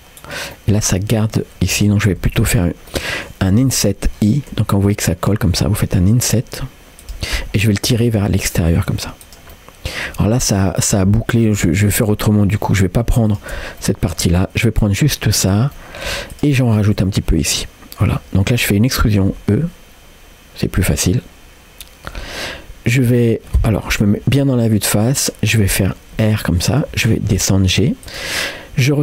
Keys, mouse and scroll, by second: 0.6 middle click, 1.0-1.3 scroll up 2, 2.3 ctrl+z, 2.9 middle click, 4.7 i, 7.4 middle click, 8.1 g, 9.5 middle click, 10.3 scroll up 1, 11.6 ctrl+z, 13.3 shift+click, 13.8 middle click, 14.4-14.7 scroll down 1, 15.8 middle click, 15.8 scroll down 2, 16.3 shift+click, 17.1 middle click, 18.2-18.6 scroll up 2, 19.5 e, 21.1-22.1 middle drag, 24.0 KP_1, 25.5-25.9 scroll down 1, 26.2 r, 26.9 g.